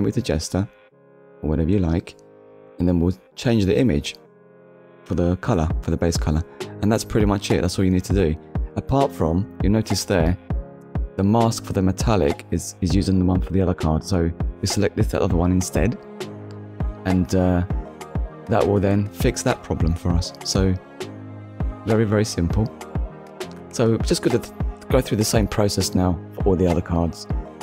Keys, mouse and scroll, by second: 0.5 click, 1.4 click, 3.4 click, 5.6-6.2 scroll down 2, 7.8 click, 8.3 middle click, 9.1-9.5 scroll up 1, 9.6 middle click, 11.4 middle click, 12.0-12.4 scroll down 2, 12.8 scroll up 1, 13.8 click, 14.9 click, 16.1 click, 17.3 middle click, 19.5-19.9 scroll down 2, 19.9 shift+middle click, 20.6 ctrl+middle click, 22.7-23.0 scroll down 1, 23.4 middle click, 24.1-24.4 scroll down 1, 25.7 middle click, 26.1-26.4 scroll up 1, 27.3 KP_1.